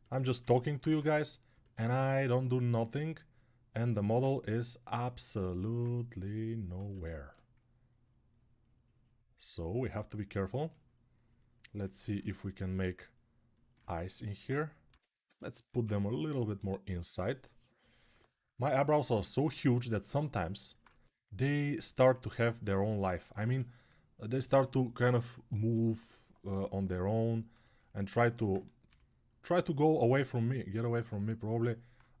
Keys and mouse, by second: 0.6 1, 6.5 ctrl+z, 14.7-15.5 typing, 19.7 ctrl+alt+click, 20.6 1, 27.7-32.2 alt+right drag, 28.6 g.